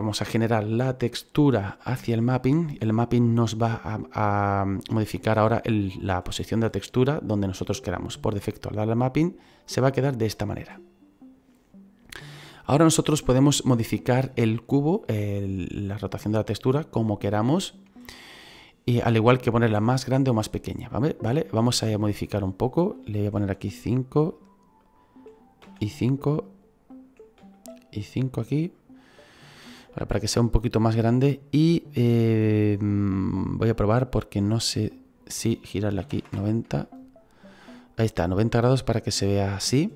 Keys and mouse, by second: 1.1 click, 7.3 click, 21.7 click, 23.3 KP_5, 23.8 click, 24.4 KP_5, 24.7 click, 25.6 KP_5, 26.3 click, 27.4 KP_5, 28.1 click, 34.8 click, 36.0 KP_9, 36.0 KP_0.